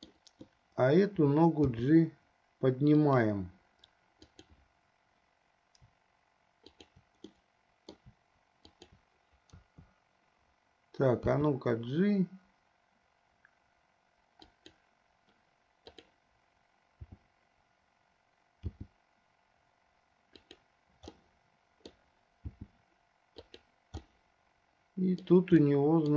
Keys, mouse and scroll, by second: 1.8 g, 4.5 click, 6.8 shift+click, 7.6-8.3 middle drag, 8.9 shift+click, 9.8 KP_3, 11.7 g, 16.1 click, 17.3 f, 18.6 g, 21.4 middle click, 22.6 g, 24.2 scroll up 1, 24.3-25.6 middle drag, 26.0 middle click.